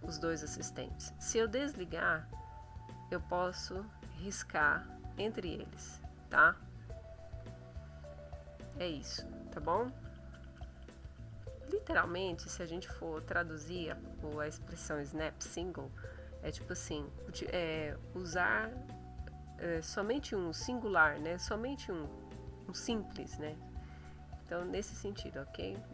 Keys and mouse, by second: 1.5 click, 2.5 click, 3.7 click, 4.6 click, 5.6 click, 6.7 click, 7.1 click, 7.6 click, 9.9 ctrl+z, 24.3 click.